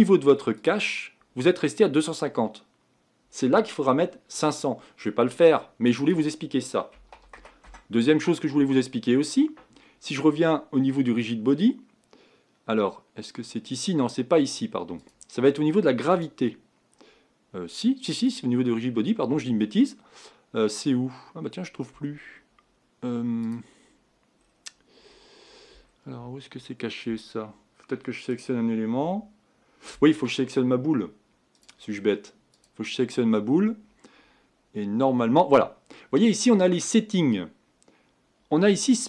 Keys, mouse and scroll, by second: 28.6 click, 31.7-32.7 drag.